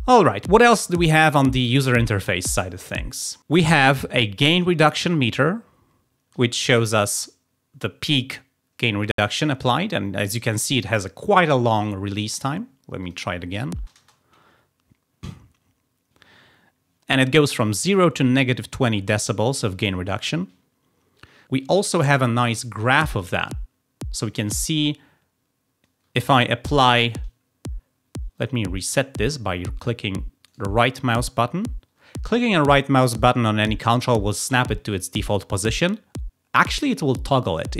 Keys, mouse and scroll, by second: 3.1 click, 12.9 click, 13.7 _, 22.8 click, 23.0 _, 26.0 _, 26.6 |, 30.4 right click.